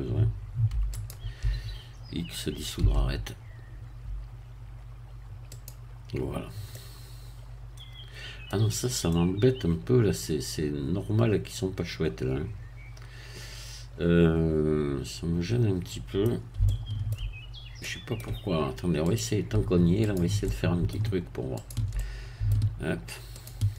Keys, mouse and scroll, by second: 0.9 alt+click, 2.8 x, 5.5 click, 6.3 scroll down 1, 6.7-8.6 middle drag, 8.8 scroll up 1, 9.1-16.4 middle drag, 16.6 shift+middle click, 17.4 shift+scroll up 1, 17.8 middle click, 19.0 click, 20.0 shift+click, 20.4 shift+middle click, 21.6 shift+click, 21.9 shift+middle click, 23.4 shift+click.